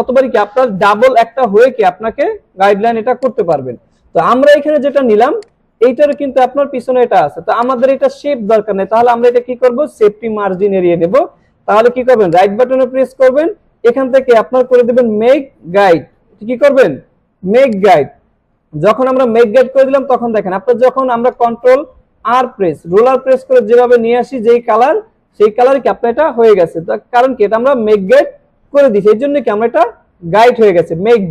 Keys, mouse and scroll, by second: 3.2 click, 5.3 space, 5.4-6.0 click, 7.4 space, 7.6 click, 12.3 right click, 17.7 click, 21.2 ctrl+Num_Lock, 21.2 click, 22.0 ctrl+r, 23.4-24.6 drag, 27.9 click, 28.1 ctrl+z.